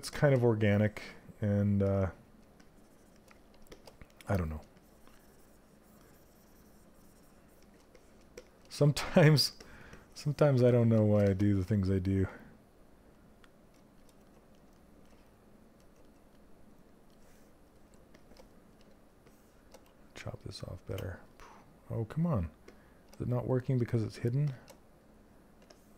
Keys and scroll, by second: 19.5 ctrl+space.